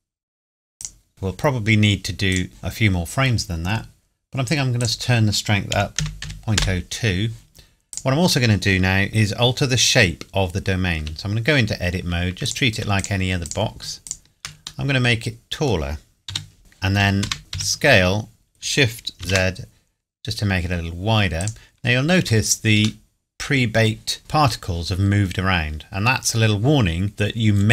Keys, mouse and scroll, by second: 0.8 click, 4.8 click, 5.7 KP_Decimal, 6.0 KP_0, 6.2 KP_2, 6.6 KP_Enter, 7.9 click, 9.1 middle click, 11.0 Tab, 12.5 click, 13.0 shift+click, 14.9 middle click, 16.3 g, 16.6 shift+s, 17.5 s, 19.2 shift+z, 21.4 click, 23.0 middle click, 25.9 scroll down 1, 27.0 scroll up 1, 27.1 middle click.